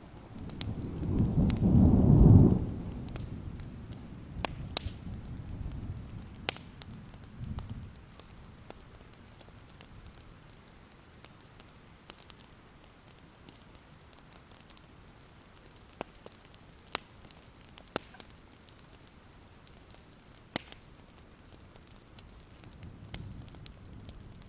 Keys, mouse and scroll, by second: 0.1 alt+scroll down 1, 0.7 alt+scroll up 1, 1.2-2.3 drag, 3.5 ctrl+z, 4.2 click, 4.9 scroll up 1, 5.7-6.8 drag, 8.8 alt+scroll down 1, 9.0 click, 9.1-9.9 scroll up 1, 10.0 ctrl+scroll up 1, 10.7-11.4 ctrl+scroll up 2, 11.5 alt+scroll up 1, 13.2 click, 14.8 shift+click, 17.4-18.3 typing, 19.0 click, 21.5 alt+click, 22.5 click, 23.3 ctrl+z.